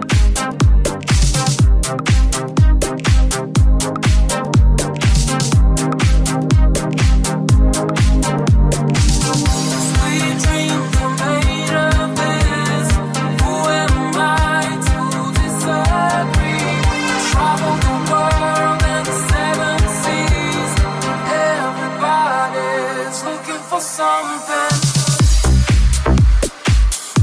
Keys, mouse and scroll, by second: 2.5 right click, 4.0-7.4 drag, 5.2 middle click, 5.2 right click, 7.4-8.4 middle drag, 7.4 g, 8.4 right click, 8.5-9.7 middle drag, 9.7 shift+right click, 9.7-14.6 shift+middle drag, 10.1 right click, 10.8 shift+right click, 11.7 right click, 11.7 j, 12.5 g, 14.6 right click, 15.2 shift+right click, 15.9 j, 16.1 right click, 17.5 g, 17.8 middle click, 18.5 right click, 18.5 shift+middle click, 19.4 shift+right click, 19.6 shift+middle click, 20.4 right click, 20.4 j, 20.4-22.5 middle drag, 20.9 g, 22.5 right click, 22.5 middle click, 23.3 shift+right click, 23.3 shift+middle click, 24.1 right click, 24.1 j, 24.2-27.2 middle drag, 24.6 g, 26.5 g, 26.7 right click.